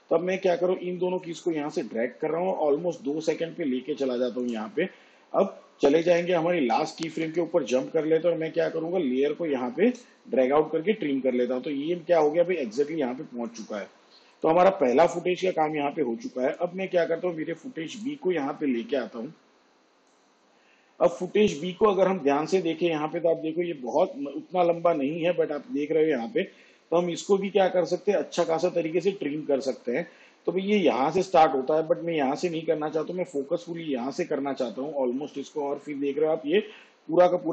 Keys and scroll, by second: 5.9 k.